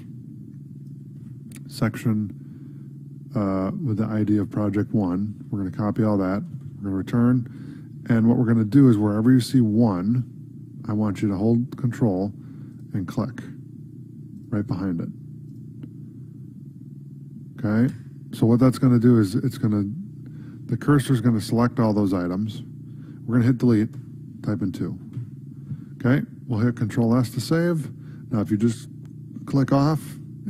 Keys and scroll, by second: 1.3 ctrl+c, 5.5 Right, 7.2 ctrl+v, 7.7 ctrl+s, 27.4 ctrl+s.